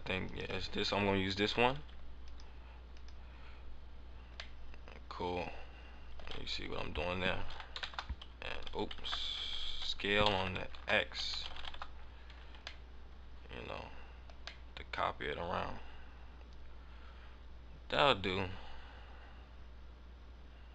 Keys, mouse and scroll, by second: 0.7 click, 0.9 click, 2.9 click, 4.4 click, 4.5 middle click, 6.6 a, 7.4 s, 9.0 ctrl+z, 10.6 KP_2, 12.1 s, 12.4 Tab, 12.8 middle click, 13.4 middle click, 14.6 middle click.